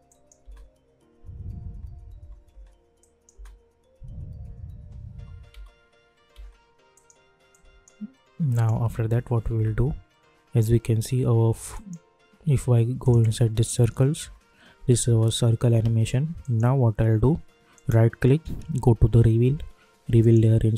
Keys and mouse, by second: 0.4 space, 3.0 click, 3.3 space, 6.9 click, 8.9 u, 9.5 u, 11.7 click, 14.2 space, 16.4 click, 17.7 right click, 20.1 click.